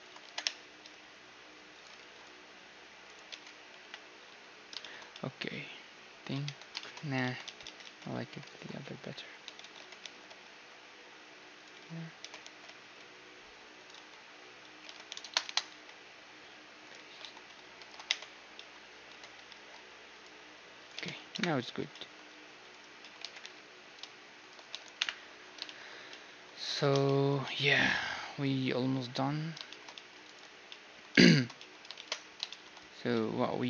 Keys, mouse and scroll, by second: 0.2 g, 2.0 ctrl+r, 3.3 Tab, 3.8 KP_1, 4.3 a, 5.1-8.5 middle drag, 6.4 Tab, 7.2 ctrl+z, 7.4 ctrl+z, 7.6 ctrl+z, 7.9 ctrl+z, 8.5-10.2 right drag, 9.4 a, 9.6 a, 9.8 s, 10.2 middle click, 12.4 e, 13.9 x, 14.9 s, 15.7 x, 17.2 a, 17.8 ctrl+n, 18.1 Tab, 18.2 middle click, 18.6-20.6 middle drag, 19.1 Tab, 19.5 ctrl+r, 21.0 Tab, 21.3 KP_1, 21.9 middle click, 23.2-24.7 right drag, 23.2 g, 24.7 a, 25.0 KP_1, 25.6-26.5 scroll down 1, 26.5-29.7 middle drag, 26.6 ctrl+s, 29.7-30.8 scroll down 1, 30.2 ctrl+s, 30.8-32.1 scroll down 1, 32.1-33.6 middle drag, 32.1 shift+z.